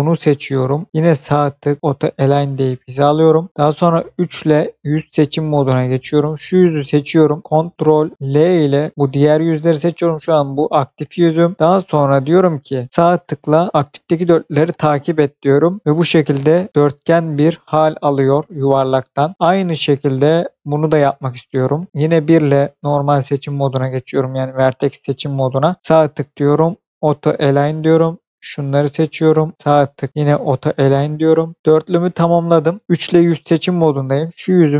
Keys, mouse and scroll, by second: 1.2 right click, 1.8 click, 5.4 click, 8.2 ctrl+l, 12.9 right click, 15.7 click, 15.8 scroll down 1, 17.6 click, 19.3 scroll up 1, 19.3-20.2 scroll down 1, 20.2 shift+middle click, 20.7 shift+scroll up 2, 21.5 middle click, 22.0 1, 22.4 click, 23.6 shift+click, 25.8 right click, 26.9 click, 28.0 click, 28.9 shift+click, 30.1 right click, 30.5 click, 31.6 click, 32.9 3, 33.7 click.